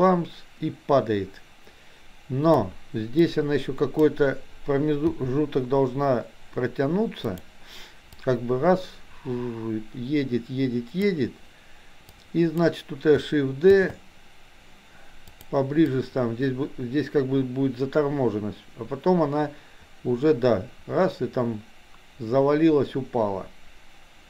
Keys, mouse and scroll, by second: 3.2-4.2 drag, 5.2 g, 8.3-11.2 drag, 12.2-12.7 drag, 13.8 shift+d, 15.9-24.2 drag.